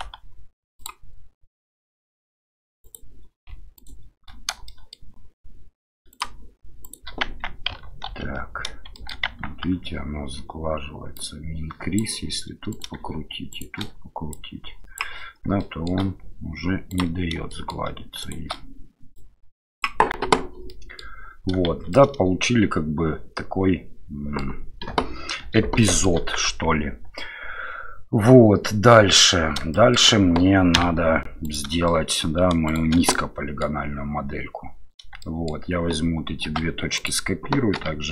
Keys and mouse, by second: 3.8 shift+click, 4.7 shift+middle click, 6.1 shift+click, 6.8 shift+click, 7.3 Tab, 8.1 ctrl+3, 8.9 shift+click, 9.3 Tab, 11.1 click, 12.7 click, 13.5 shift+click, 14.5 click, 15.6 shift+middle click, 16.9 click, 17.5 shift+middle click, 18.2 shift+click, 20.3 Tab, 20.7-21.0 middle drag, 21.7 shift+z, 21.9-24.4 middle drag, 24.9 KP_7, 25.8 shift+middle drag, 26.5 Tab, 29.7 shift+middle click, 30.8 1, 31.4 right click, 31.8 shift+middle click, 32.7 shift+right click, 33.1 middle click, 35.2 shift+middle click, 36.5 shift+d, 37.7 p.